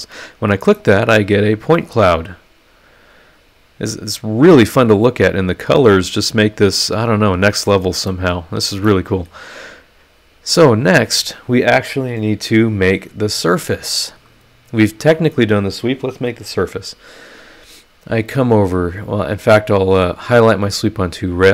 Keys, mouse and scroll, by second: 0.7-7.9 middle drag, 0.8-7.9 drag, 8.1 click, 8.1 right click, 8.8 middle click, 8.9 click, 9.6 click, 20.0 click.